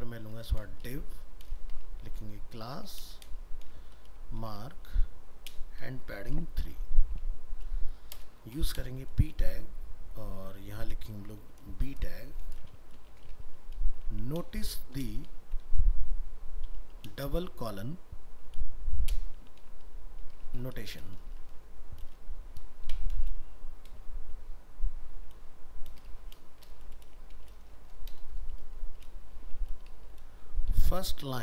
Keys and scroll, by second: 3.1 ctrl+space.